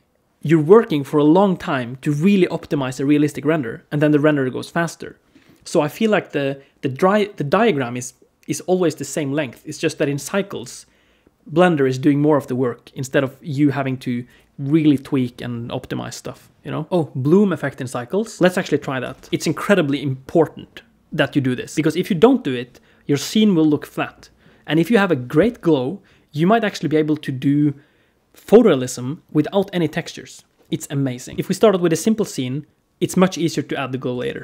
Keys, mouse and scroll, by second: 31.3 middle click, 33.9 KP_1.